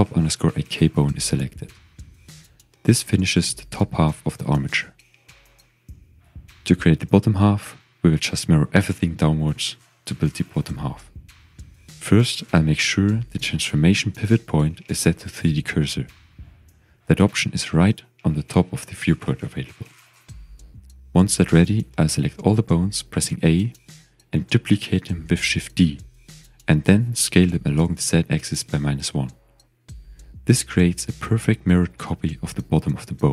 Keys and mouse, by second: 0.4 click, 0.8 g, 1.8 click, 3.9 click, 5.7 shift+click, 7.0 ctrl+s, 7.6 shift+click, 10.2 a, 12.3 click, 12.9-15.7 drag, 18.5 click, 22.6 a, 24.9 s, 25.9 click, 26.5 shift+d, 27.0 click, 27.8 s, 28.7 z, 29.9 -, 30.1 1, 30.3 Return, 31.3 shift+click.